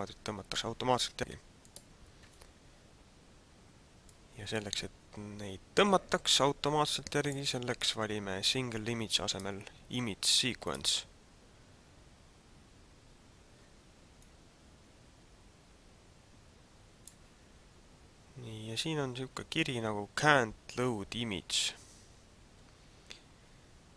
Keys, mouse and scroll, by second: 1.8 click, 4.1 click, 9.2 click, 14.2 click.